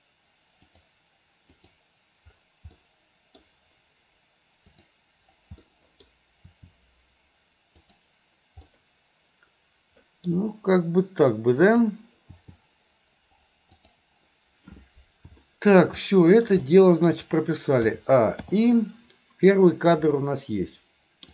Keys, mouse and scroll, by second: 0.8 click, 1.6 click, 2.8-3.5 middle drag, 4.7 click, 5.7-6.1 middle drag, 6.5 r, 8.7-10.3 middle drag, 11.7 click, 12.3 r, 15.5-15.9 middle drag, 16.1-16.5 middle drag, 16.7 middle click, 17.9 a, 18.5 i.